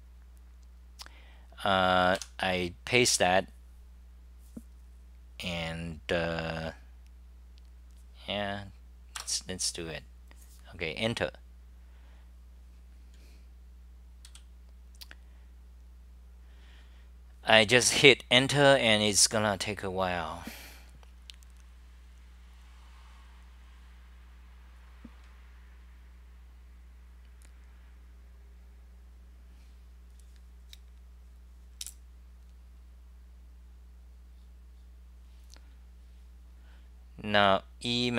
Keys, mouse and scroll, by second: 2.2 k, 17.8 typing, 19.3 typing.